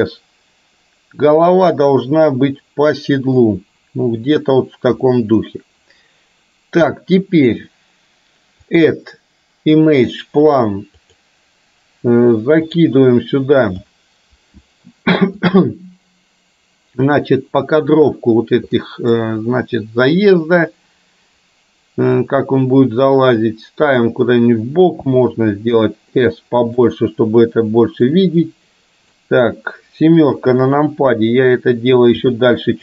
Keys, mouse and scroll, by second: 5.0-6.9 middle drag, 8.9-11.9 drag, 18.8-19.2 middle drag, 22.4-25.0 drag, 25.0 s, 28.0-30.4 drag, 30.4 KP_7, 32.3 g.